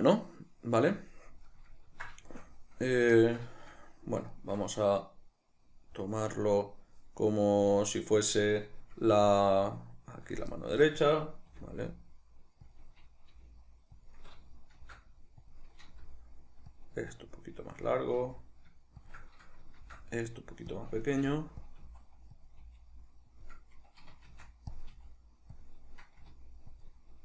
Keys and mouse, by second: 10.3 click, 10.6-12.7 ctrl+middle drag, 11.4 r, 12.7 click, 13.3 g, 14.0 click, 14.8 shift+d, 15.5 click, 15.9 r, 16.8 click, 16.9 s, 17.9 click, 18.2 g, 19.1 shift+click, 19.8 shift+d, 20.8 click, 21.1 r, 21.7 click, 21.8 s, 22.5 click, 22.6 g, 23.5 click, 24.3 shift+d, 24.8 click, 24.9 s, 25.7 click, 26.2 r, 26.9 click.